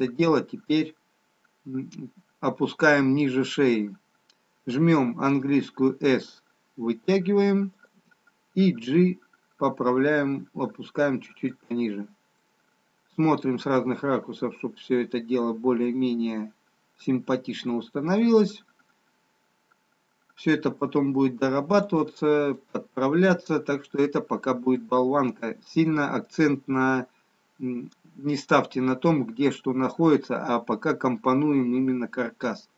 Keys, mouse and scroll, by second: 5.3 s, 9.1 g, 12.3 middle click, 20.7 g, 23.2 middle click, 24.7 middle click.